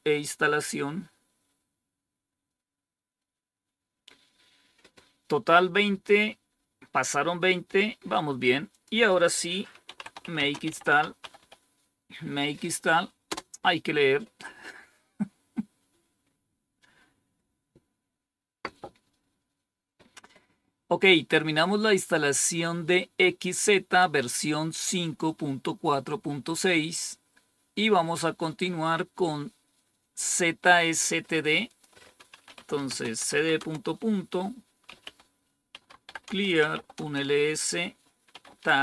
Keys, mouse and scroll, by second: 8.6 click, 9.6-11.8 typing, 13.2 typing, 26.9 click, 31.6 click, 32.3-37.0 typing, 38.2-38.8 typing.